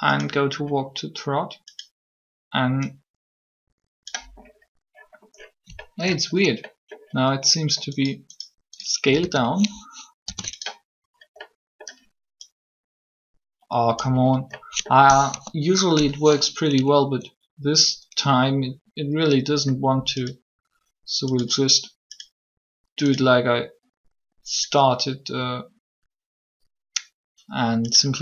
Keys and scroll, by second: 9.0 a, 9.2 a, 10.1 alt+s, 15.2 3.